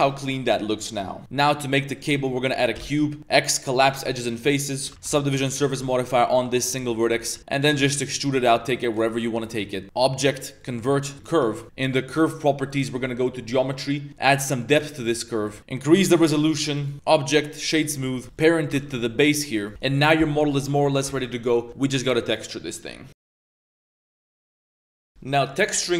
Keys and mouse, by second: 0.0 drag, 0.3 middle click, 0.5 Tab, 1.2 shift+a, 2.3 Tab, 2.7 x, 4.8 KP_7, 4.9 Tab, 5.0 ctrl+2, 5.5 ctrl+3, 6.3 Tab, 6.5-9.3 typing, 6.9 shift+middle click, 9.0 shift+middle click, 9.8-11.2 drag, 11.4 click, 11.4 middle click, 11.4 right click, 12.7 click, 14.3-15.5 drag, 16.1 click, 16.4 click, 16.6 click, 18.0 a, 18.1 a, 18.2 middle click, 18.7 ctrl+p, 19.7 Tab, 19.7 ctrl+s, 19.7 x, 19.7 z, 19.7 a, 19.8-20.2 middle drag, 21.5 middle click, 25.6-25.9 middle drag.